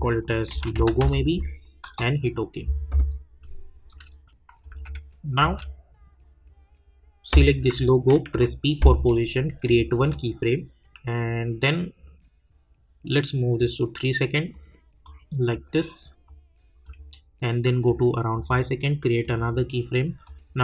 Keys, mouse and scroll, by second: 4.7 space, 8.3 p, 9.6 click, 13.5 click.